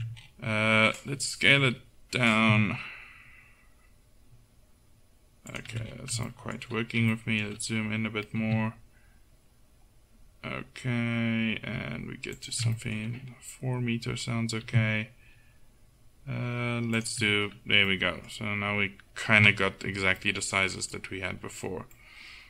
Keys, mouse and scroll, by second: 0.2-1.6 middle drag, 1.6 s, 8.5 s, 14.7 s, 19.4 KP_Decimal.